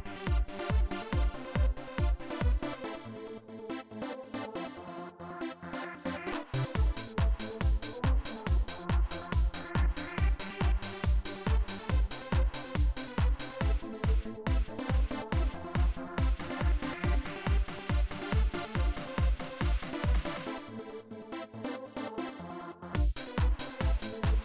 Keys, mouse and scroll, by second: 0.6 right click, 4.4 click, 6.0 click, 15.4 click, 19.7 click, 21.0-22.2 drag, 22.7 click.